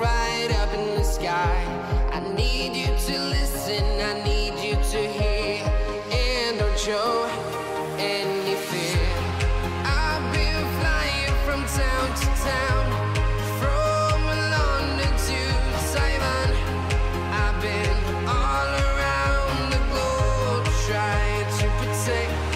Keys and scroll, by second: 1.4 alt+Tab, 4.0 Tab, 4.1 space, 5.6-8.9 typing, 11.7 ctrl+a.